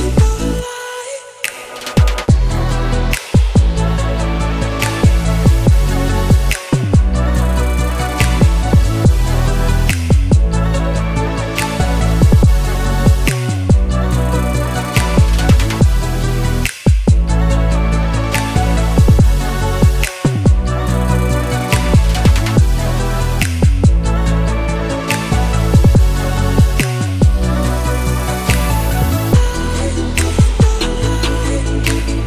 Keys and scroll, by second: 1.8 BackSpace, 2.0 3, 2.1 Return, 13.2 •, 13.8 4, 14.2 Return, 16.9 •, 17.2 2, 17.5 Return.